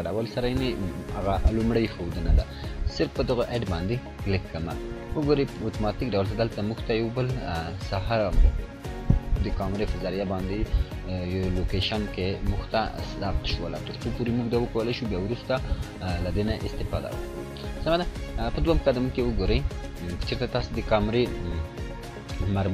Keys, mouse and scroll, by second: 4.2 click, 19.1-20.1 drag.